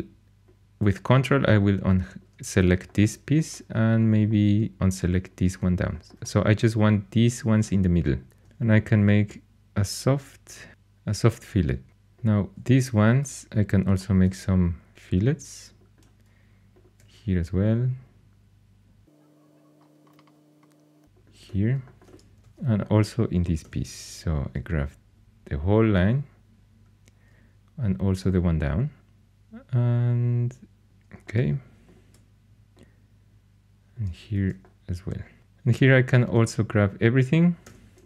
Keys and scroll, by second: 22.4 shift+super+e, 23.6 2, 30.8 shift+super+e, 34.3 shift+super+e, 37.6 3.